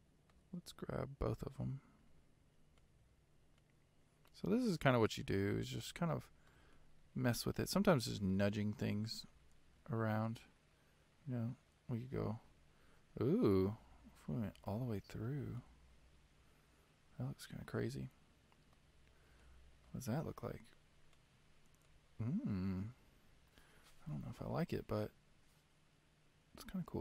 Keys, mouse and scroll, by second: 2.9 click, 3.7 click, 5.1 shift+click, 5.9-7.6 middle drag, 7.6-8.0 scroll up 1, 8.0 shift+middle click, 8.9 g, 14.2-18.7 middle drag, 19.0-19.4 scroll down 1, 19.4-21.3 shift+middle drag, 21.3 click, 22.0-24.9 middle drag.